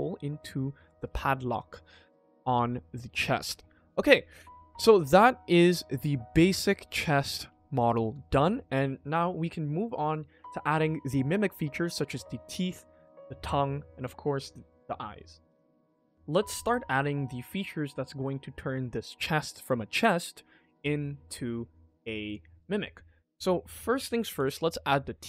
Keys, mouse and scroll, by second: 0.4 scroll up 2, 0.5 shift+middle click, 0.9 ctrl+s, 3.6-4.0 scroll down 2, 4.0 middle click, 4.3 middle click, 4.6 middle drag, 5.0 scroll up 1, 5.0-6.1 middle drag, 6.4 middle drag, 6.9 middle drag, 7.4 shift+middle click, 23.2 click, 24.3 ctrl+s, 24.5-24.9 middle drag, 25.1 shift+middle drag.